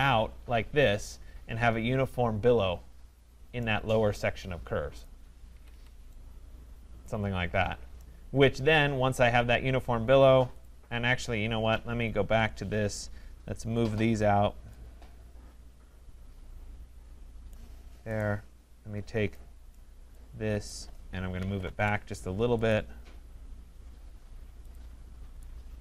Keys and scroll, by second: 5.5 Escape, 11.8 ctrl+z, 21.7 Return.